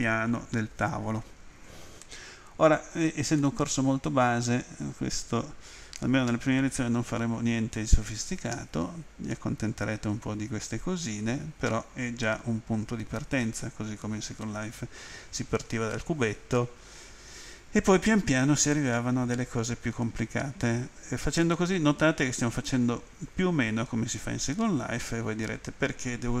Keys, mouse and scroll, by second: 3.4 middle click, 21.4 middle click.